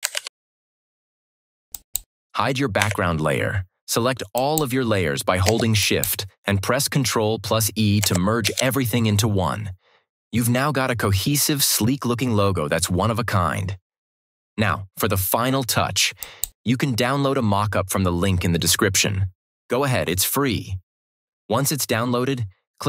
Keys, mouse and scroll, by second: 0.1 ctrl+-, 1.6 click, 2.7 Delete, 4.2 click, 5.7 click, 8.3 ctrl+e, 16.1 click.